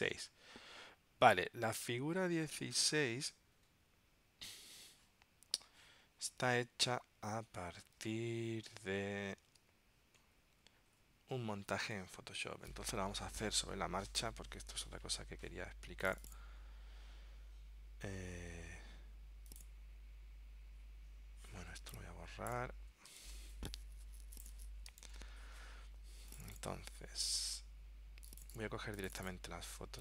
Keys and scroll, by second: 9.6 super+Tab, 23.3 super+BackSpace, 25.2 super+BackSpace.